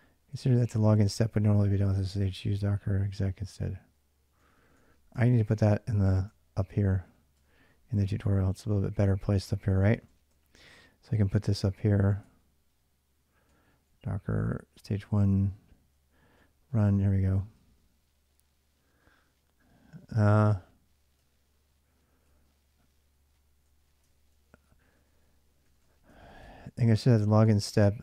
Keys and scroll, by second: 0.0-12.0 typing, 0.7 ctrl+[, 0.7 ctrl+j, 13.3-27.6 typing.